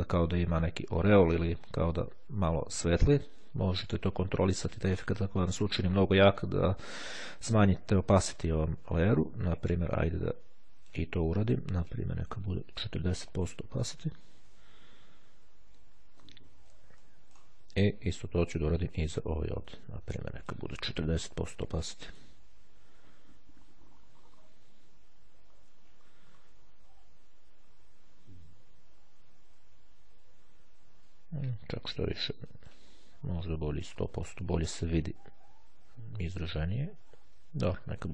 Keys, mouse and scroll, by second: 3.4-11.4 drag, 11.6 click, 12.9 KP_4, 13.0 KP_0, 13.6 KP_Enter, 15.0-15.6 scroll down 2, 15.7-16.7 ctrl+scroll down 2, 17.1 ctrl+middle click, 19.0 click, 20.2-21.1 drag, 21.5 KP_4, 21.8 KP_Enter, 24.4-25.2 ctrl+scroll up 2, 25.5-26.4 ctrl+scroll up 2, 26.4-26.8 scroll up 2, 26.8-27.8 ctrl+scroll down 1, 28.0-28.4 ctrl+scroll down 1, 29.0-30.0 ctrl+scroll down 3, 32.6 click, 33.4 KP_1, 34.1 KP_0, 34.9 KP_Enter, 37.2 click, 37.6 KP_5, 37.7 KP_Enter.